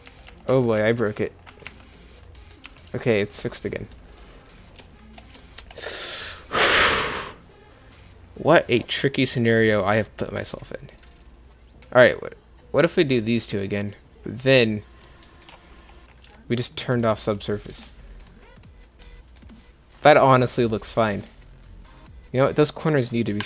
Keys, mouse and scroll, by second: 0.1 ctrl+z, 0.3 ctrl+z, 0.5 ctrl+z, 0.8 ctrl+z, 1.7 1, 2.7 2, 2.9 1, 4.5-5.2 middle drag, 15.1-15.5 middle drag, 15.5 Tab, 16.3 Tab, 17.7 Tab.